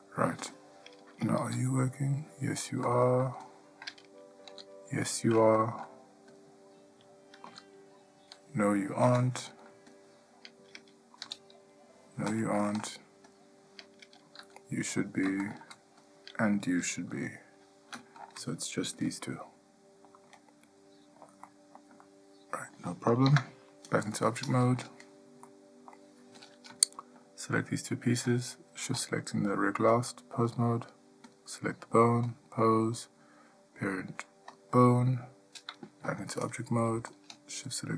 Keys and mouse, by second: 1.7 g, 4.7 g, 6.5 click, 11.4 g, 13.5 click, 14.6 g, 17.3 g, 19.6-20.4 middle drag, 20.6-21.4 ctrl+middle drag, 21.7-22.0 middle drag, 22.2-22.9 shift+middle drag, 23.5 Tab, 25.7-26.1 middle drag, 26.6 click, 30.2-30.7 drag, 31.5 click, 32.5-34.7 drag, 36.2 Tab, 37.3 click.